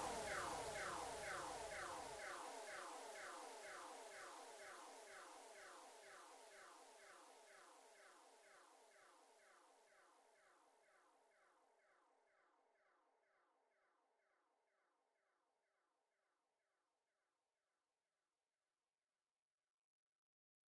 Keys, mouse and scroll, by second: 0.0-0.5 scroll down 2, 0.5-2.2 middle drag, 2.2 click, 3.1 click, 3.6 scroll up 2, 3.9 scroll down 3, 4.1-5.8 middle drag, 5.8 Tab, 6.2-7.0 scroll down 4, 7.0-7.3 scroll up 1, 7.5-8.6 middle drag, 8.6 scroll up 1, 8.8-11.2 middle drag, 11.2-14.3 drag, 14.5 s, 16.9 KP_7, 18.0-18.3 scroll up 1, 18.8 s, 20.3 KP_3.